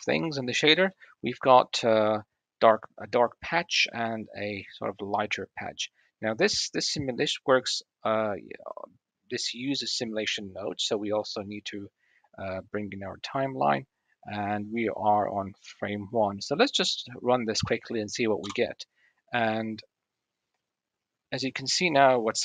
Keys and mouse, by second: 0.5-1.2 drag, 1.2-3.2 middle drag, 3.5 click, 3.7 middle click, 4.4 drag, 4.6 middle click, 5.1 click, 8.1 click, 9.9-13.2 drag, 14.4 click, 14.9 click, 15.4-15.9 drag, 16.5-16.9 drag, 18.3 space.